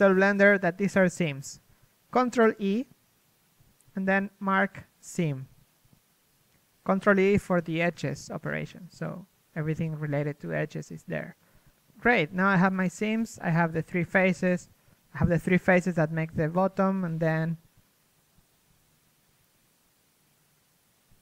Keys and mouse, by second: 9.9 a, 11.7-16.9 middle drag, 11.7 z, 16.9 ctrl+Tab, 17.0-18.6 middle drag, 18.3 z.